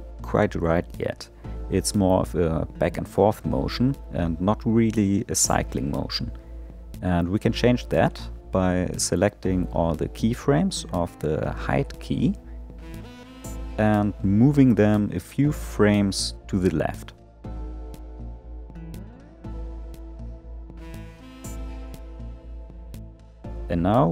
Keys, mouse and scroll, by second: 0.6 space, 6.6 click, 9.0 click, 14.3 click, 14.4 click, 16.7 g.